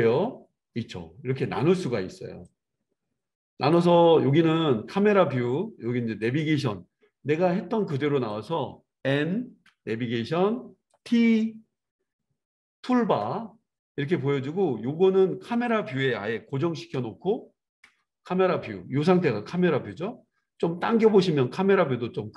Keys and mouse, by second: 0.0-6.6 drag, 6.6-15.6 middle drag, 8.3 click, 9.6 n, 13.0 t, 15.6 click, 15.7-22.3 middle drag, 16.9 KP_0, 17.8 KP_0.